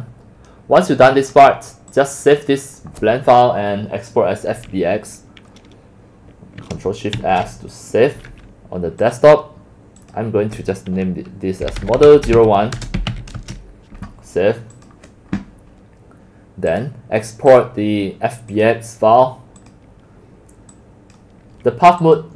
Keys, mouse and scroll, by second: 0.0 middle click, 0.0 middle click, 1.5 middle click, 7.2 ctrl+shift+s, 9.2-11.6 drag, 11.6-14.1 typing, 14.9 click, 16.7 click, 17.5 click, 18.5 click, 19.6 click, 20.2 right click, 20.8 click.